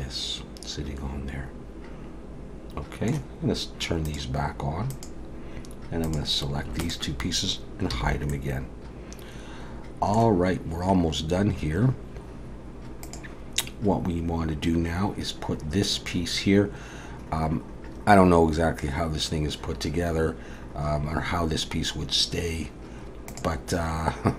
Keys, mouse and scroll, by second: 4.1 click, 4.9 click, 6.0 click, 6.8 shift+click, 7.9 h, 8.3 middle click.